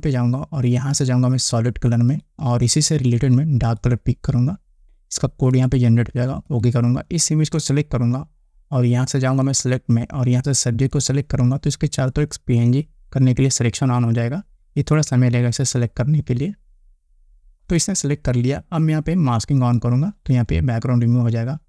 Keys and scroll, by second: 19.9 Return.